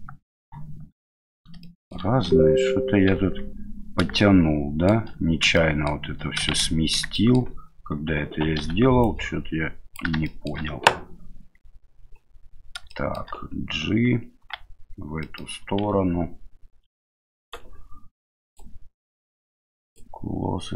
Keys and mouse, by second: 1.6-1.9 shift+middle drag, 3.2 Tab, 4.2 middle click, 5.5 middle click, 6.5 shift+z, 7.1 middle click, 8.6 1, 9.1 click, 10.2 middle click, 12.9 shift+middle click, 14.4 g, 18.6-20.4 drag.